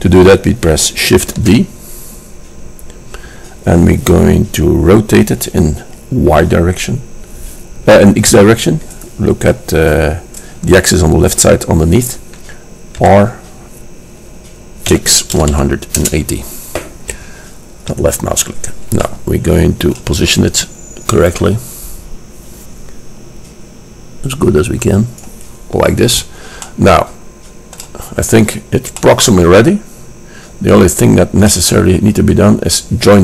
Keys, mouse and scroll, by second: 1.4 shift+d, 19.2-23.1 middle drag, 26.2-28.3 middle drag, 32.1-33.2 middle drag.